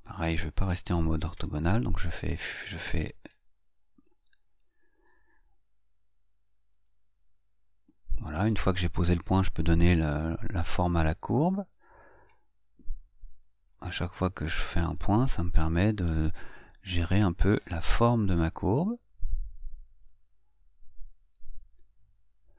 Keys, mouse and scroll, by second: 1.7 F8, 4.9 F8, 7.0 click, 12.1 click, 13.5 click, 15.2 click, 17.8 click, 20.3 click, 21.8 click.